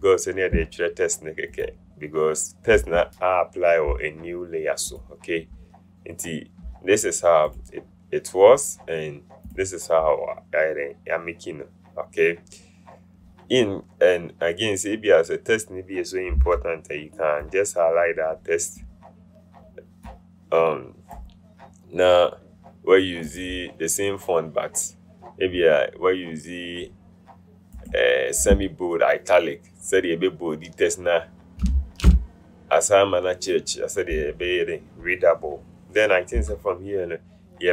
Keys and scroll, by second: 16.8 t, 32.0 Return, 36.7 v.